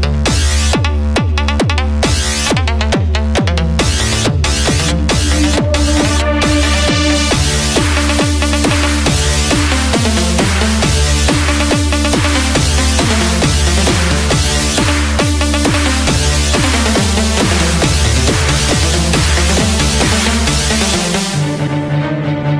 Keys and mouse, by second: 3.4-8.2 drag, 12.2-15.5 drag.